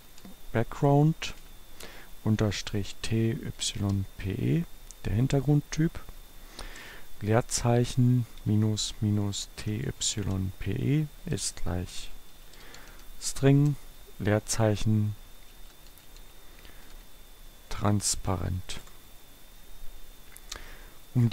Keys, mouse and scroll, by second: 1.0 shift+-, 2.5 t, 3.0 p, 3.9 e, 6.7 space, 8.5-13.4 typing, 14.9-18.7 typing.